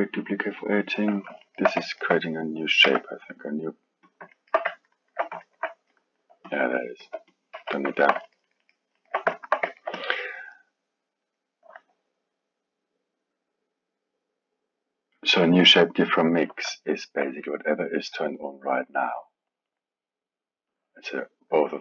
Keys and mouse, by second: 1.4-2.8 alt+middle drag, 2.8 g, 4.3-6.4 alt+middle drag, 6.4-7.0 drag, 7.0 x, 7.5 KP_1, 7.9-9.9 alt+middle drag, 9.9 drag, 11.2-14.3 drag, 16.8-17.9 alt+middle drag, 17.9 click, 18.6-21.8 drag.